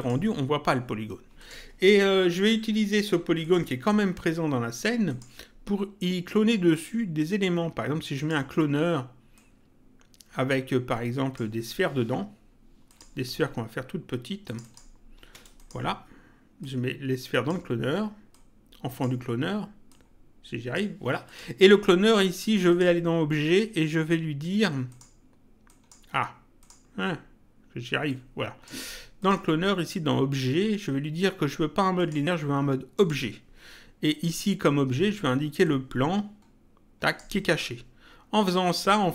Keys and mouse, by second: 1.3 click, 3.4 click, 5.0 click, 8.0 click, 9.2 click, 12.8 click, 14.4 click, 16.6 click, 18.2 click, 19.8 click, 21.2 click, 22.6 click, 24.8 click, 28.0 click, 29.2 click, 31.9 click, 35.6 click.